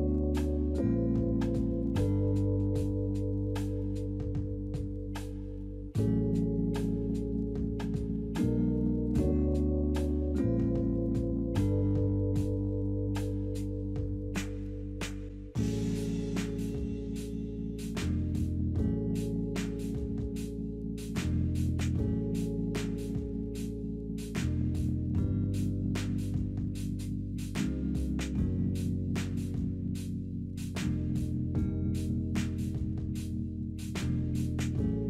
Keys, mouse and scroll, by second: 6.6 double click, 7.3-8.7 typing, 9.9 double click, 10.8-11.7 typing, 11.6 Return.